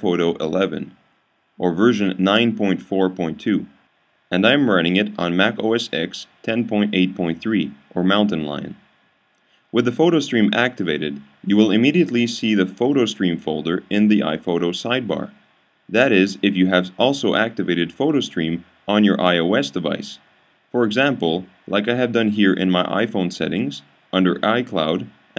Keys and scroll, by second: 0.6 typing.